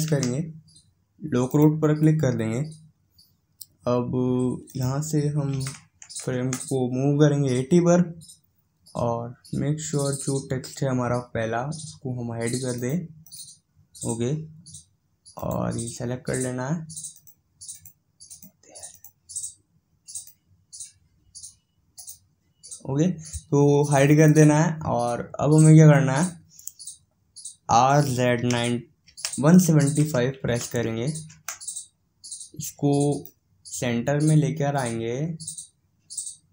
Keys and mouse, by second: 4.6-15.0 drag, 15.4-35.0 drag.